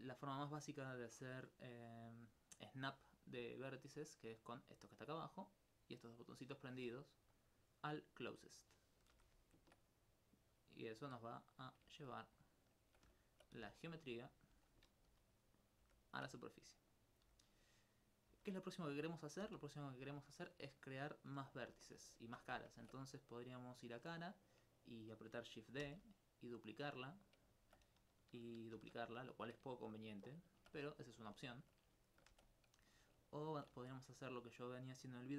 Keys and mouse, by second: 0.2 right click, 7.4 click, 9.2 g, 11.7 click, 13.3 alt+right click, 14.3 click, 15.9 g, 16.1 click, 16.4 alt+click, 17.1 right click, 17.7 click, 18.0 right click, 18.8 click, 19.2 right click, 19.5 g, 19.9 click, 21.7 alt+click, 22.4 alt+click, 22.8 ctrl+Tab, 23.6 click, 24.2 right click, 25.9 shift+d, 26.9 click, 27.6 alt+click, 28.8 shift+d, 29.3 click, 29.8 alt+click, 31.4 alt+click, 32.1 shift+right click, 32.5 click, 32.9 alt+click, 33.8 ctrl+x, 34.6 click.